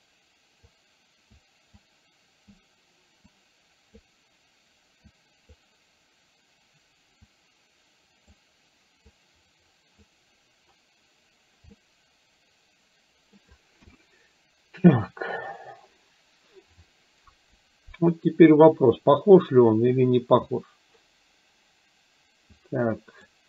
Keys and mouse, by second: 0.8 click, 1.8 click, 3.3 click, 5.2 click, 7.4-8.4 drag, 9.2 click, 11.7-13.4 middle drag, 13.8 KP_1, 22.7 click.